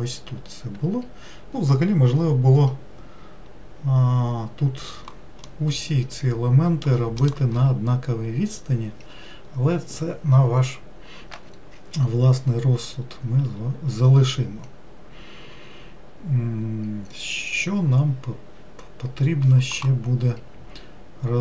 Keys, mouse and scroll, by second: 5.7-8.9 middle drag.